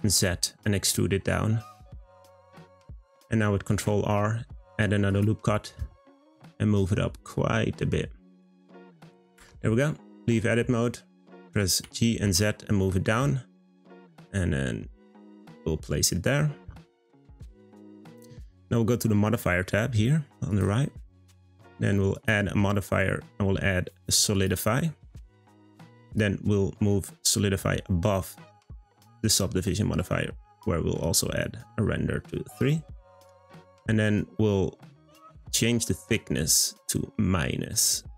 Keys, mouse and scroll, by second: 3.7 r, 9.3 Tab, 10.1-11.8 scroll up 1, 11.8 g, 20.5 click, 22.1-25.1 drag, 26.1-28.8 drag, 31.0-34.0 drag, 34.9-37.9 drag.